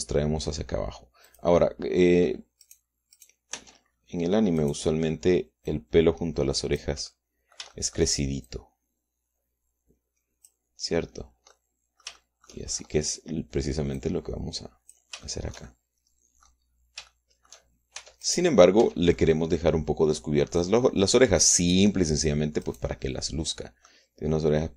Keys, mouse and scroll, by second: 2.2 click, 3.6 click, 4.1 click, 4.5 Tab, 5.5 click, 6.6-7.9 drag, 8.0 click, 8.7 shift+middle click, 9.4-11.6 shift+drag, 12.5-13.6 middle drag, 13.9 scroll up 1, 14.9-16.1 drag, 16.2-17.6 shift+middle drag, 18.1 shift+middle click, 18.9 shift+Tab, 19.2 middle click, 19.7 Tab, 20.1 middle click, 21.5-22.9 drag, 23.6-24.7 right drag, 23.9-24.7 drag.